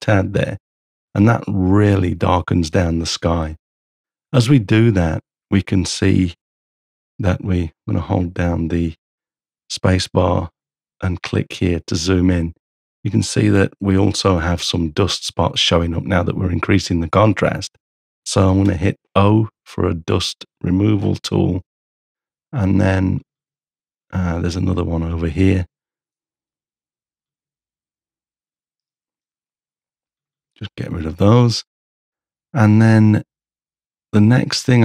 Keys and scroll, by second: 8.0 space, 18.7 o, 22.1 space, 28.8 h.